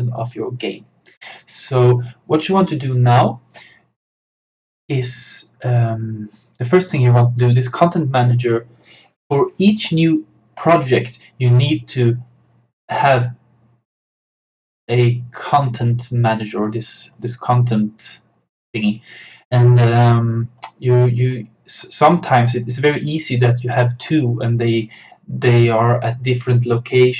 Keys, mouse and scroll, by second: 7.2-10.2 drag.